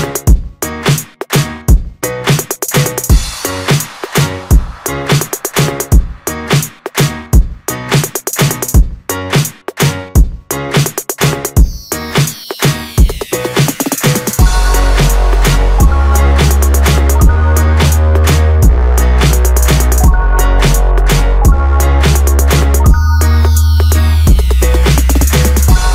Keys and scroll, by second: 3.9 Return, 11.2 ctrl+g, 21.2 ctrl+z.